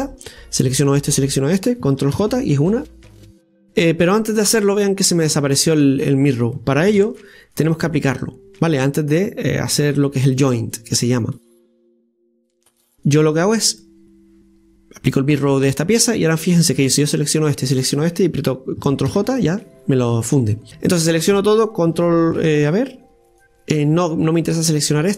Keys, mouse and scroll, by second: 0.1-2.2 right drag, 2.2 ctrl+j, 7.0 ctrl+z, 10.2-12.8 right drag, 12.8 click, 13.6 click, 17.6 shift+right click, 19.1 ctrl+j, 20.7 a, 24.6-25.1 shift+right drag.